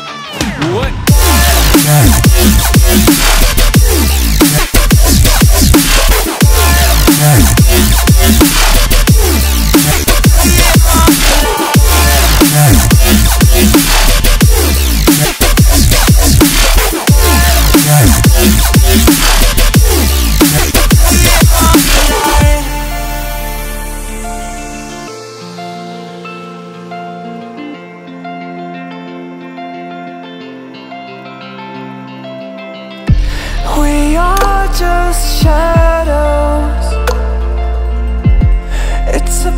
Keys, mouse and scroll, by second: 1.0 scroll down 1, 1.2 shift+middle click, 1.7 click, 2.0 e, 3.1 click, 3.2 click, 4.0-5.5 shift+middle drag, 4.5 e, 5.6 click, 5.8 click, 6.6 v, 7.0 click, 7.2 click, 7.7-9.3 shift+middle drag, 9.7 v, 10.7 click, 12.1 r, 12.9 click, 13.3 click, 13.8 click, 15.6 r, 16.5 click, 16.6 click, 17.2 click, 18.4 shift+middle click, 18.8 click, 19.0 e, 20.1 e, 20.8 r, 21.9 click, 22.2 click, 22.6 s, 23.8 click, 24.0 e, 24.8 click, 24.9 click, 25.5 middle click, 25.9 click, 26.2 e, 26.8 r, 27.6 click, 27.8 s, 29.2 r, 31.1 e, 31.2 v, 31.8 click, 32.5 click, 33.4 click, 34.3 v, 34.8 e, 35.2 v, 35.9 r, 37.0-38.0 drag, 38.2 shift+middle click, 38.5 e, 39.4 r.